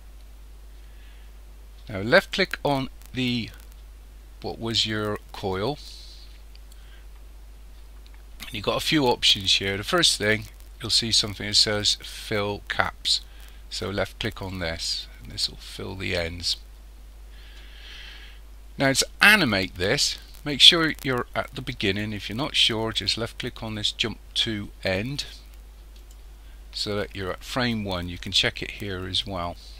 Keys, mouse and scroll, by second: 2.2 click, 14.3 click, 26.0 click.